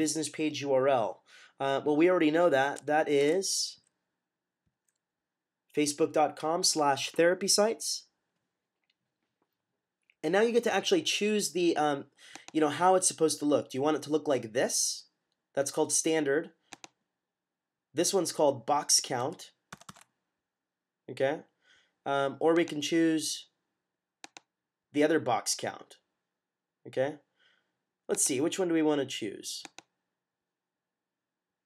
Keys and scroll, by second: 3.1 typing, 19.6 =.